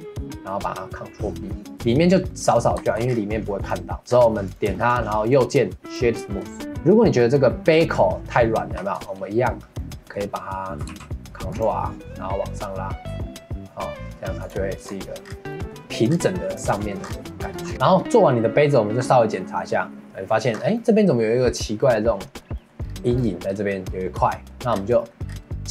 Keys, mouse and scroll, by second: 2.3 middle click, 2.8 Tab, 3.0 scroll down 3, 3.3 middle click, 3.6 click, 3.9 shift+middle click, 4.4 click, 4.7 shift+middle click, 5.2 right click, 6.2-8.7 shift+middle drag, 8.7 Tab, 9.7-10.9 middle drag, 10.9 ctrl+r, 14.8 Tab, 15.2 scroll down 1, 15.5 middle click, 16.1-16.4 scroll down 3, 16.4 click, 16.7 middle click, 17.0 scroll down 1, 17.3 middle click, 17.6 scroll up 5, 17.7-20.5 middle drag, 20.5 scroll up 1, 20.7-22.8 middle drag, 22.8-23.1 scroll down 1, 23.1-24.2 scroll up 3, 23.1 middle click, 24.2 middle click, 24.7-25.7 scroll down 5, 25.0 middle click.